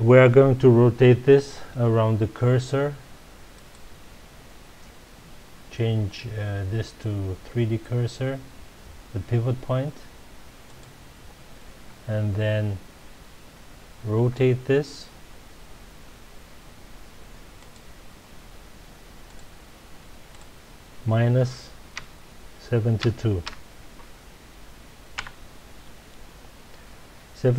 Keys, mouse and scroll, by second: 3.5-6.5 drag, 14.1 r, 17.7 click, 19.2 click, 20.3-23.3 drag, 25.2 KP_Enter.